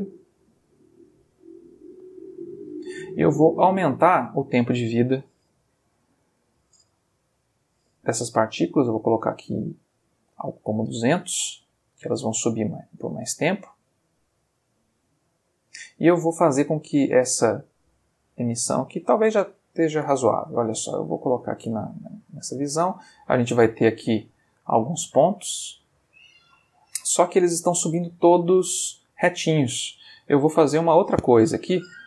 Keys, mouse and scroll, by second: 4.2 click, 5.3 1, 5.5 0, 6.1 BackSpace, 7.8 2, 8.0 0, 10.2 Return, 16.5 middle click, 19.9 space, 21.2 click, 22.6-23.2 ctrl+middle drag, 24.2-30.9 drag.